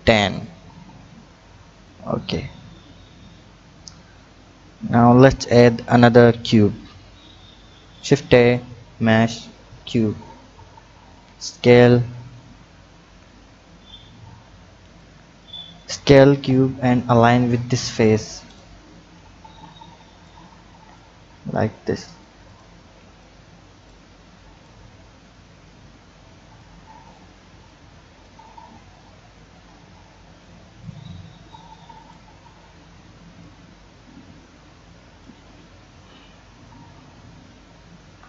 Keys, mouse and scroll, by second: 0.1 click, 0.9 Tab, 1.8 click, 6.1 shift+a, 11.2 s, 13.0 KP_7, 13.6-15.0 scroll up 3, 15.0-16.4 drag, 16.4 Tab, 18.0 click, 18.4 click, 19.4 b, 20.9-22.6 drag, 22.7 b, 24.6-27.1 drag, 27.4 b, 28.9-30.8 drag, 31.1 b, 33.4-36.1 drag, 36.9-38.0 scroll down 3, 38.0 KP_1.